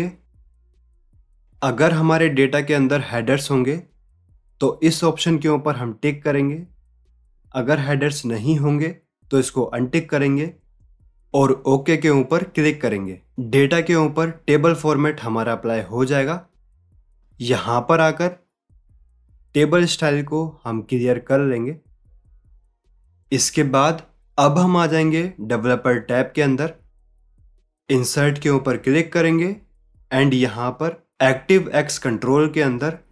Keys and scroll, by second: 0.3 ctrl+t.